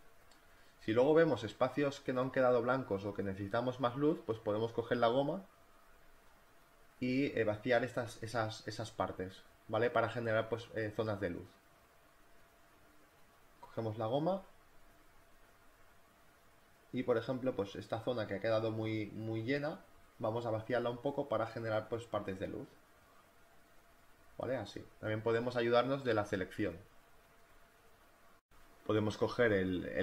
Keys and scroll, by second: 4.2 x, 4.4 space, 6.4 space, 10.4 space, 14.9 z, 16.6 e, 19.4 [, 22.3 e, 24.4-26.8 typing, 27.0 ctrl+alt+z, 28.5 e, 29.3 ctrl+alt+z, 29.5 e.